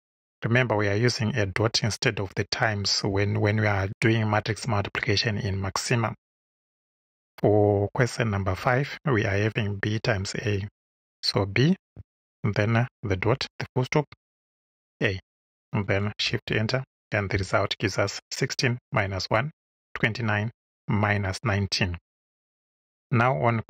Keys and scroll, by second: 10.2 shift+b, 11.9 •, 14.6 shift+a, 16.2 shift+Return.